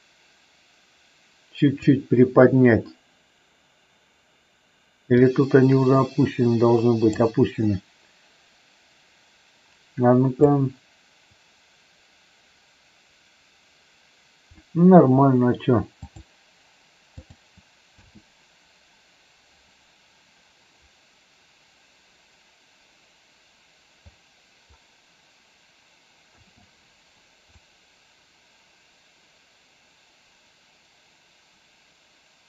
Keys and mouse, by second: 5.1-7.1 drag, 10.5-14.5 drag, 17.9 space, 26.2 space, 27.5-32.4 drag.